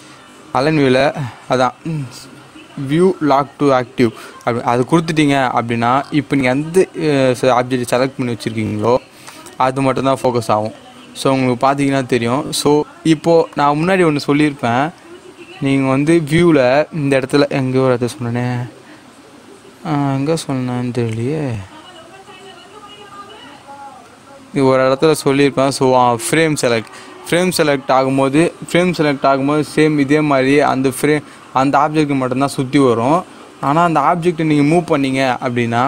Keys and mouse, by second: 4.7 click, 9.2-15.7 drag, 16.0 click, 30.6-35.8 drag.